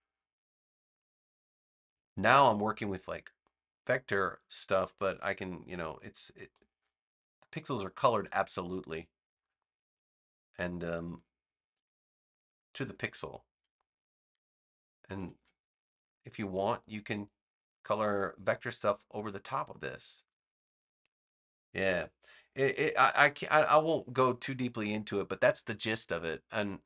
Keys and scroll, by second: 5.0 v.